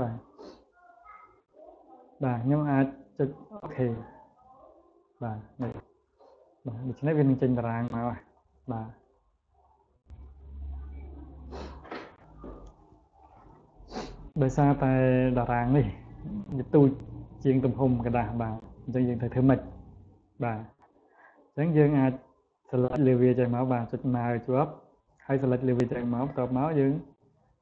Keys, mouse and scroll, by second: 3.6 click, 4.9 click, 5.9 click, 6.4 click, 6.8 click, 7.1 click, 7.4 click, 7.9 click, 8.1 click, 8.4 click, 8.9 click, 9.4 click, 9.8 click, 10.1 click, 10.5 click, 10.9 click, 11.2 click, 15.4 click, 15.8 click, 16.1 click, 16.6 click, 22.0-25.7 drag.